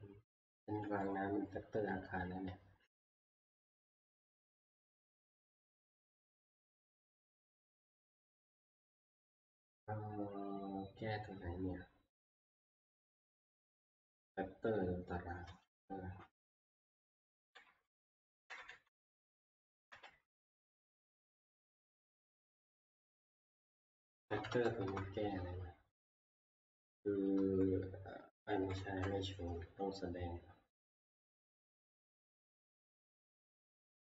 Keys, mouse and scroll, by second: 1.1-3.7 drag, 15.7 click, 17.0 ctrl+Page_Down, 17.5 ctrl+Page_Down, 18.3 ctrl+Page_Down, 18.5 ctrl+Page_Down, 18.7 ctrl+Page_Down, 19.9 ctrl+Page_Up, 23.9 Right, 24.1 Right, 24.3 Right, 24.9 Up, 24.9 Left, 26.8 Up, 26.8 Right, 27.4 Left, 28.5 Down, 28.8 Down, 31.8 click, 33.6 click.